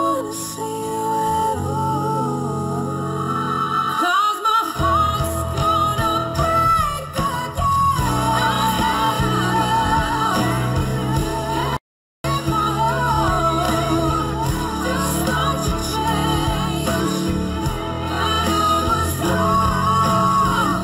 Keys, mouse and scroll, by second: 5.8 v, 13.7 ctrl+t.